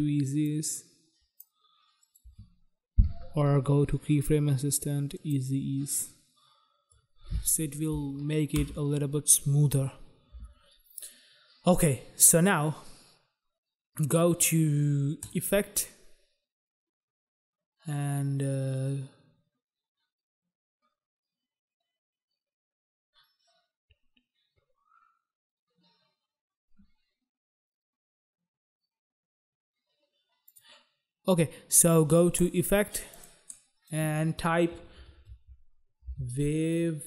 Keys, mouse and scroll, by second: 0.7 click, 2.2 right click, 2.4 right click, 5.4 click, 5.4 click, 7.1 click, 8.7 space, 10.5 space, 15.3 click, 15.5 click, 30.7 click, 31.4 click, 32.6 click, 32.6 click, 33.2 click, 33.4 click, 33.7 click, 35.2-37.0 typing.